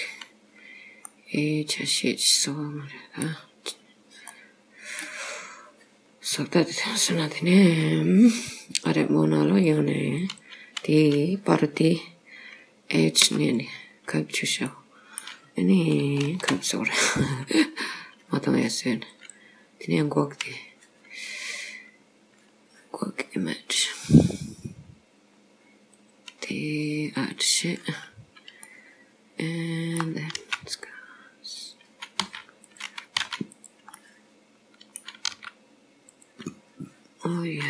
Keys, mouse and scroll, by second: 0.1-0.6 scroll down 3, 1.2 middle click, 3.9-4.3 scroll down 3, 4.3 middle click, 9.0 click, 10.2 click, 13.3 h, 14.2-14.7 scroll up 2, 14.7 middle click, 16.3 shift+a, 28.7 middle click, 30.4 r, 32.3 s, 33.2 s, 34.1 middle click, 35.4 r, 36.6 scroll down 2.